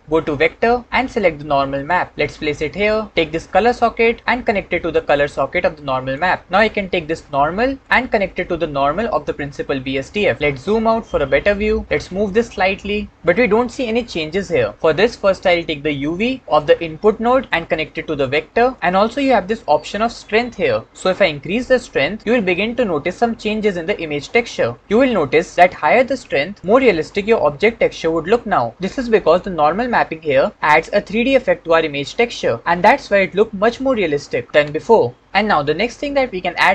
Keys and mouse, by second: 4.3-6.1 drag, 7.8-10.3 drag, 11.8-13.0 drag, 17.5-18.8 drag, 20.9-25.5 drag, 25.5-26.7 middle drag, 26.7 click.